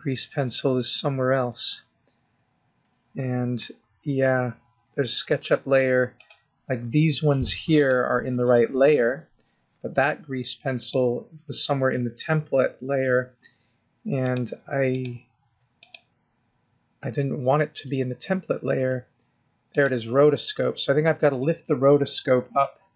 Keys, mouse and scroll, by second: 0.5-1.4 scroll up 1, 1.4-2.0 scroll up 2, 2.0-3.1 scroll up 6, 3.1-3.5 scroll down 1, 6.2 click, 7.7 click, 8.4 click, 9.4-10.8 scroll down 3, 10.8 click, 11.4-12.5 scroll down 1, 14.2 click, 14.9 click, 15.7 click, 16.4-18.1 scroll down 3, 18.1-18.8 scroll down 2, 19.7 click, 20.5-21.2 scroll up 1, 21.3 click, 22.7-22.9 scroll up 3.